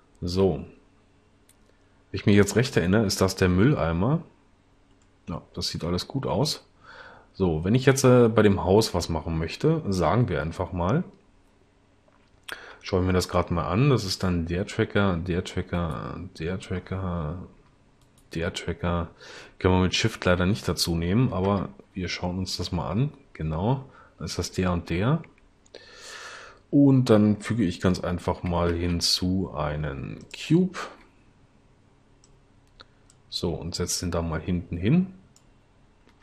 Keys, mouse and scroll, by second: 12.7 0, 21.5 0, 28.7 shift+a.